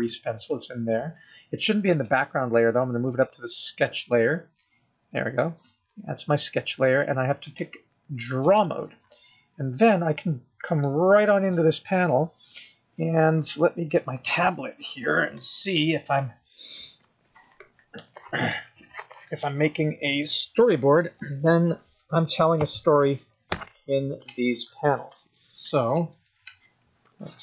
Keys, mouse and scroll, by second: 2.2 click, 7.7 click, 9.9 scroll up 4, 11.1 shift+middle click, 19.7 click, 20.6 click, 20.8 click, 21.3 click.